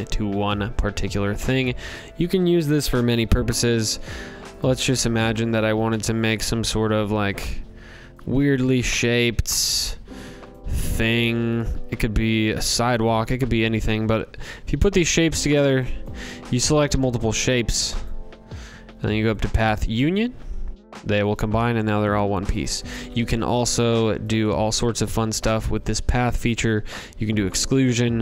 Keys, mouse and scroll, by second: 0.0 click, 0.5 ctrl+z, 2.3 ctrl+z, 2.8 click, 3.6 click, 3.9 ctrl+c, 4.3 ctrl+v, 5.8 click, 7.1 click, 8.0 ctrl+c, 8.4 ctrl+v, 9.5 click, 9.9 ctrl+c, 10.4 ctrl+v, 12.3 click, 15.0 click, 15.7 click, 17.0 click, 18.3 click, 19.1 click, 19.8 click, 21.0 click, 21.5 ctrl+z, 22.1 ctrl+z, 23.6 click, 24.7 click, 26.3 click, 27.4 click.